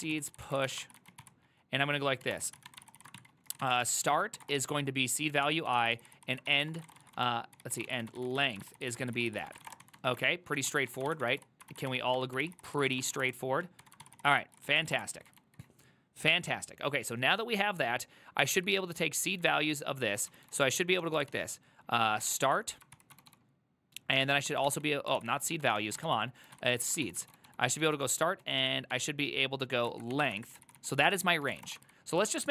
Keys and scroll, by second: 0.0-4.5 typing, 5.5 Tab, 5.8 ctrl+c, 6.1 ctrl+c, 6.2 ctrl+c, 6.6-15.6 typing, 14.1 ctrl+c, 14.4 ctrl+c, 14.5 ctrl+c, 20.6-29.0 typing, 30.0 ctrl+y, 30.2 Return, 30.5 ctrl+c, 30.5-32.5 typing, 30.6 ctrl+c, 30.8 ctrl+c, 30.9 ctrl+c, 31.0 ctrl+c, 31.1 ctrl+c, 32.3 ctrl+u.